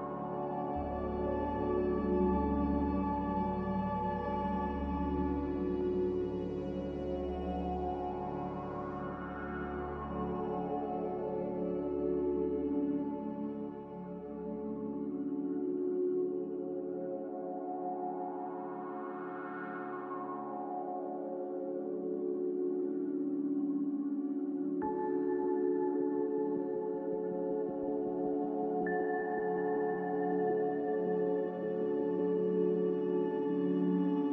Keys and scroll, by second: 3.1 c, 4.3 z, 9.3 5, 10.6 5, 13.7 5, 17.0 5, 21.0 5, 21.9 b, 28.6 Escape, 29.3 a, 32.9 z, 34.1-34.3 typing.